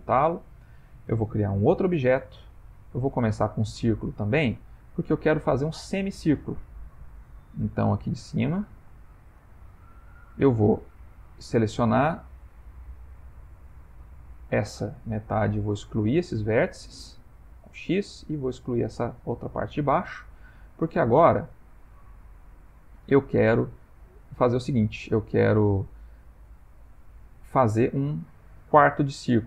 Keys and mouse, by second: 1.7 shift+a, 4.3 ctrl+middle click, 4.8 ctrl+middle click, 5.7 middle click, 5.9 middle click, 8.5 click, 9.3 Tab, 11.5 click, 15.6 x, 18.2 click, 19.1 x, 22.7 shift+middle click, 23.3 ctrl+middle click, 24.2 shift+middle click, 24.6 shift+middle click, 26.9 click.